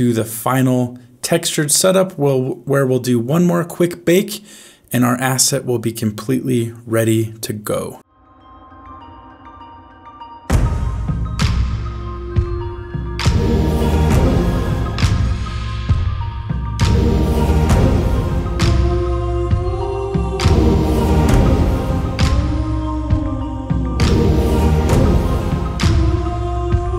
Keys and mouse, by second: 8.1 click, 8.3 click, 8.5 shift+middle click, 8.5-11.3 typing, 8.6 click, 8.8 click, 8.9 click, 9.0 middle click, 9.1 middle click, 9.3 click, 9.4 click, 9.5 click, 9.6 middle click, 9.7 click, 9.9 middle click, 10.0 click, 10.1 ctrl+middle click, 10.4 click, 10.5 middle click, 10.7 middle click, 10.7 click, 10.9 click, 11.0 middle click, 11.2 ctrl+middle click, 11.3 click, 11.6 click, 11.7 click, 12.6 shift+middle click, 12.9 middle click, 13.0 click, 13.1 ctrl+shift+middle click, 13.5 click, 13.6 ctrl+shift+s, 13.7 shift+d, 13.9 click, 14.0 click, 14.3 ctrl+s, 14.3 middle click, 14.4 click, 14.6 f, 14.6 middle click, 14.7 click, 14.8 middle click, 14.8 click, 14.9 middle click, 15.0 click, 15.5 middle click, 15.5 click, 15.7 click, 16.1 middle click, 16.2 click, 16.4 middle click, 16.5 middle click, 16.7 click, 17.0 middle click, 17.0 click, 17.5 click, 17.8 middle click, 18.1 click, 18.2 middle click, 18.3 click, 18.3 middle click, 18.5 click, 18.6 click, 18.7 middle click, 18.7 click, 19.0 click, 19.1 click, 19.4 click, 19.4 ctrl+middle click, 19.5 f, 19.6 click, 19.8 click, 20.0 click, 20.2 ctrl+middle click, 20.5 click, 20.8 click, 21.1 click, 21.4 click, 21.5 click, 21.5 f, 21.7 click, 21.9 click, 22.2 click, 22.4 click, 22.7 click, 22.8 click, 23.0 click, 23.3 f, 23.4 click, 23.7 click, 23.8 ctrl+middle click, 24.0 click, 24.2 ctrl+middle click, 24.3 ctrl+f, 24.3 middle click, 24.3 click, 24.5 click, 24.8 click, 25.1 click, 25.2 click, 25.7 ctrl+middle click, 25.8 click, 25.9 middle click, 25.9 f, 25.9 click, 26.0 click, 26.3 click, 26.4 click, 26.5 middle click, 26.5 click, 26.8 click.